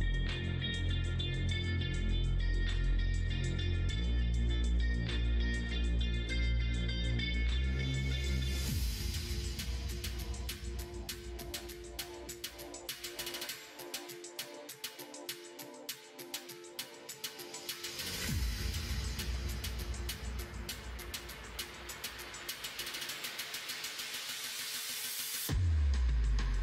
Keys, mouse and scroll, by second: 1.8 e, 3.0 e, 4.3 middle click, 5.5 e, 8.4 middle click, 10.4 click, 11.2 shift+click, 11.5 shift+click, 12.4 e, 15.2 e, 16.9 e, 18.8 e, 20.4 e, 22.3 middle click, 23.4 shift+click, 24.4 middle click, 24.9 shift+middle click, 26.0 e.